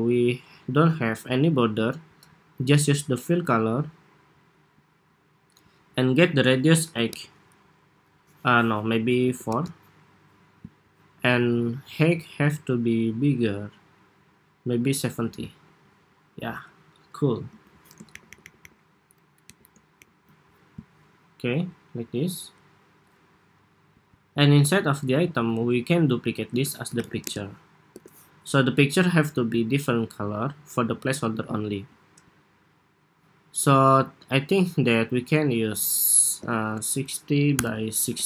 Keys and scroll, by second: 17.8 alt+shift+Up, 18.2 alt+shift+Up, 18.4 alt+shift+Up, 19.3 alt+shift+Down, 19.8 alt+Up, 25.6 super+d, 26.4 super+r.